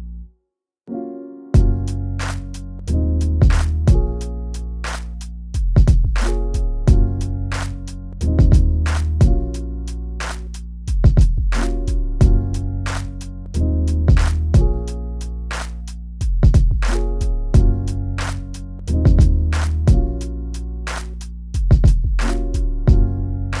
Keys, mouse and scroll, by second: 0.1 click, 0.4 shift+d, 1.2 click, 1.6 middle click, 2.0 scroll down 1, 2.2 middle click, 2.9-3.7 scroll up 1, 3.7 click, 3.9 shift+middle click, 4.3 scroll, 4.3-5.0 scroll up 8, 4.9 shift+middle click, 5.5 click, 5.7 shift+middle click, 5.7 scroll up 1, 6.6 click, 11.7-12.1 scroll down 12, 12.6 scroll up 2, 13.0 click, 13.4-14.7 middle drag, 14.7 scroll down 2, 15.1 scroll up 1, 16.3-17.8 middle drag, 16.3 scroll down 1, 16.3-16.9 scroll up 4, 17.2 scroll down 1, 17.8-18.2 scroll up 4, 18.5 Tab, 18.6 scroll down 6, 18.8 middle drag, 19.6 middle click, 20.1 shift+middle click, 20.3 scroll down 1, 20.5 middle click, 20.7 Tab, 20.9 middle drag, 21.0-21.5 scroll up 2, 21.1 click, 21.5 click, 21.7 scroll down 1, 21.9-22.7 middle drag, 22.7-23.1 scroll up 1, 23.1 click, 23.3-23.6 middle drag.